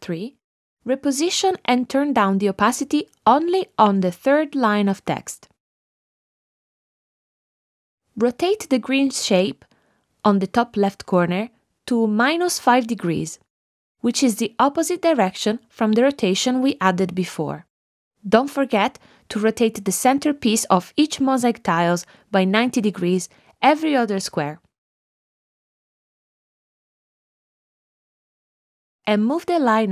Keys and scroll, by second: 5.6 shift+Down, 12.1 -, 12.4 5, 13.1 Return.